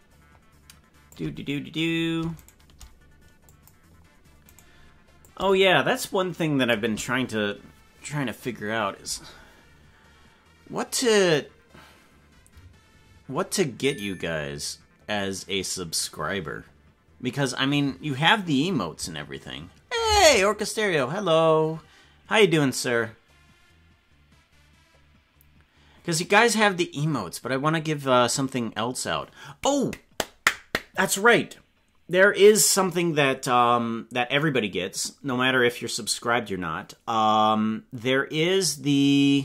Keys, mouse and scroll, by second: 2.4 shift+right click, 3.4 click, 4.5 right click, 5.2-6.8 shift+drag.